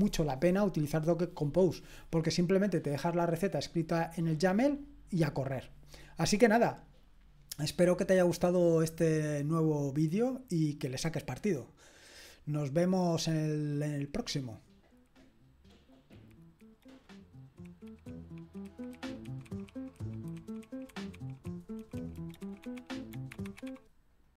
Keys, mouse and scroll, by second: 13.4 click, 24.2 click.